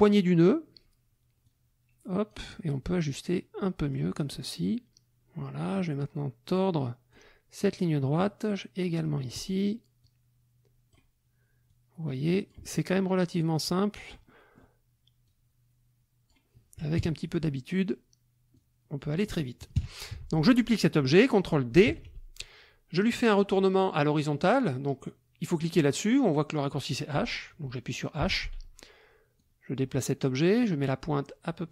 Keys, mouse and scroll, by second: 1.4-2.5 drag, 3.1-4.1 drag, 4.3 click, 5.7-7.3 drag, 8.2-9.5 drag, 10.0-11.1 drag, 11.7-12.7 drag, 13.2-14.8 drag, 15.2-16.5 drag, 17.0 KP_Subtract, 18.5 click, 19.8 KP_Subtract, 20.1 F1, 20.3 click, 21.9 ctrl+d, 28.2 h, 29.4-31.7 drag.